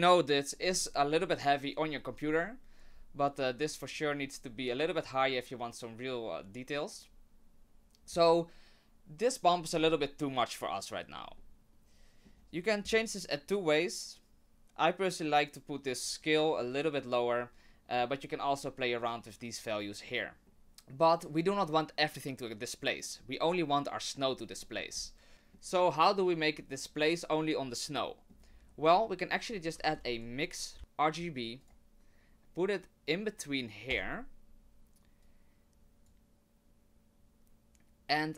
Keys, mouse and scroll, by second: 9.7-11.1 scroll up 4, 16.0-16.4 click, 16.2 click, 16.5 click, 16.7 click, 24.6 middle click, 24.9-25.3 scroll up 1, 29.6 click, 29.8 shift+a, 35.2 click.